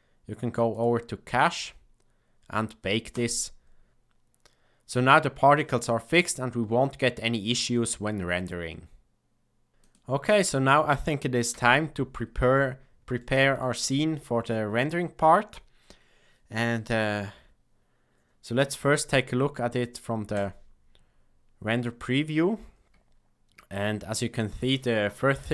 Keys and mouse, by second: 0.7 click, 11.5 n, 13.2 shift+middle click.